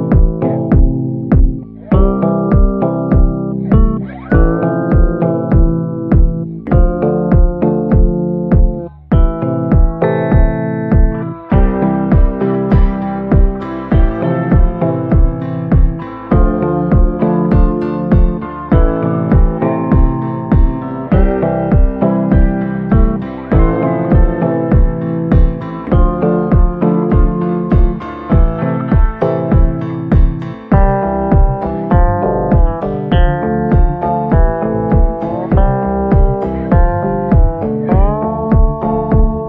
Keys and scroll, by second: 2.1-4.4 typing, 8.8-13.9 typing, 9.8 Caps_Lock, 16.3 typing, 17.7-18.4 typing, 21.1-21.9 typing, 28.5 7, 29.8 Return, 35.0 c.